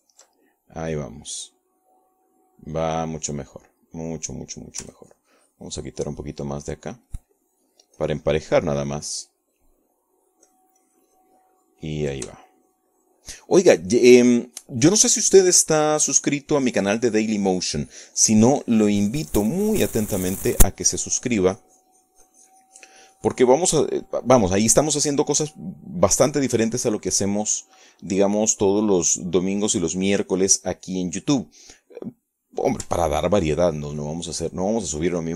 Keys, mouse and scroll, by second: 2.3-5.1 ctrl+middle drag, 6.1 middle click, 6.9-14.0 ctrl+drag, 14.3-25.8 ctrl+shift+drag, 25.9 shift+middle click, 30.8-31.9 drag, 32.5-33.5 middle drag, 34.0 middle click, 34.7 click, 34.9-35.3 ctrl+drag.